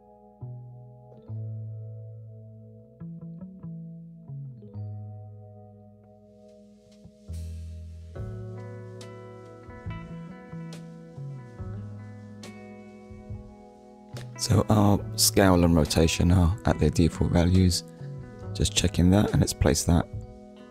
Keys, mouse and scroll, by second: 0.1 n, 1.0 shift+c, 2.2 m, 4.2 shift+b, 4.5 0, 6.2 Return, 7.9 click, 8.5 click, 10.5 shift+middle click, 15.7 shift+d, 16.5 right click, 17.6 click, 19.5 scroll up 1, 20.1 shift+middle click.